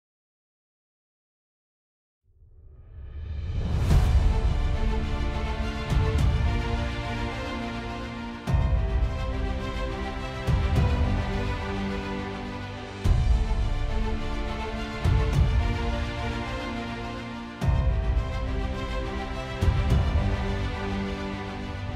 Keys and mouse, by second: 0.5 ctrl+v, 0.7 Return, 8.3 middle click, 15.0 KP_2, 15.2 Return, 15.8 KP_1, 16.0 Return, 17.7 KP_2, 18.2 KP_1, 19.1 Return, 19.7 KP_2, 19.8 Return, 20.4 Return, 20.6 KP_1, 20.9 Return.